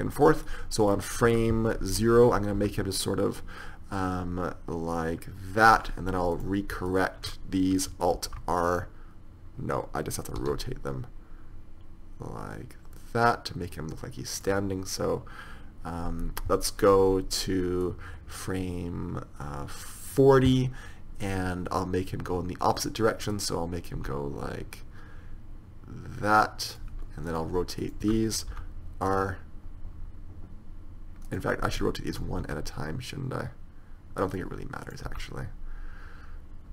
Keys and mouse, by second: 0.8-2.9 middle drag, 1.7 KP_1, 2.9 r, 6.7-10.7 drag, 8.5 alt+r, 10.7 r, 18.2-20.0 drag, 23.7-25.9 right drag, 24.5 r, 27.6-30.0 right drag, 28.8 r, 32.4-34.6 right drag, 32.7 r, 35.2-36.7 right drag, 35.4 r.